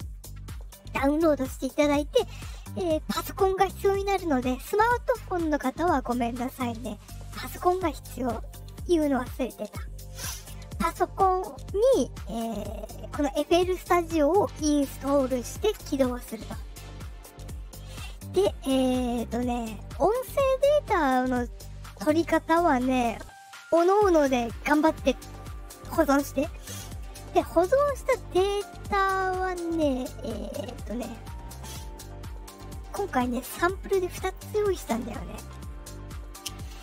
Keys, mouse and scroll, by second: 29.5 click, 30.4-32.5 drag, 33.8 click.